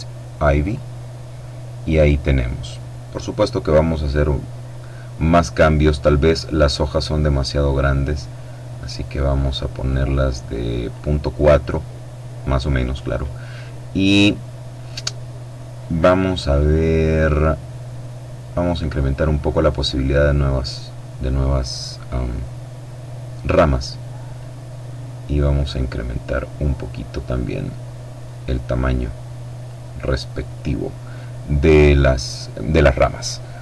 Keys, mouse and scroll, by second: 0.4 click, 3.2-5.0 scroll down 1, 5.2-5.8 scroll up 1, 7.5-11.1 drag, 11.1-11.8 scroll down 1, 11.8-12.2 scroll down 1, 12.4-13.0 scroll down 1, 18.5-20.4 drag, 24.1-29.8 drag, 33.5-33.6 scroll up 1.